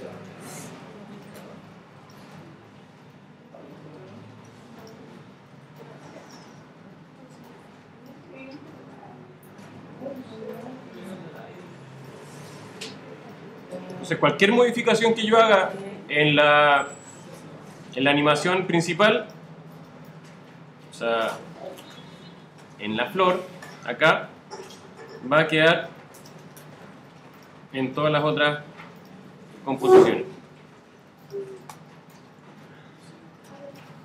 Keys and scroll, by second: 2.9 super+v, 8.8 super+c, 9.1 super+v, 12.8 super+c, 14.6 super+v, 22.0 super+c.